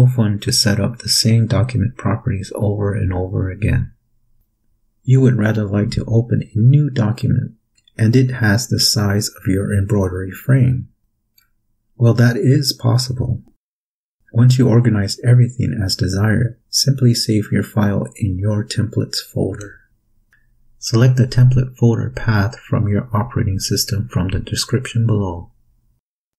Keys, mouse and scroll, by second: 20.9 click, 23.9 click.